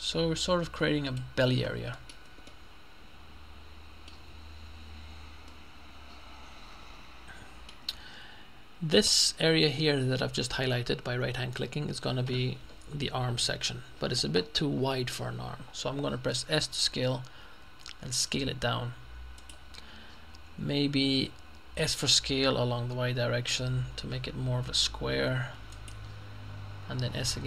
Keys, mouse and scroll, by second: 2.0 middle click, 2.1 Tab, 4.2 Tab, 5.5-8.2 middle drag, 9.2 right click, 16.5 s, 19.4 click, 21.8 s, 22.9 y, 25.7 click, 27.1 s.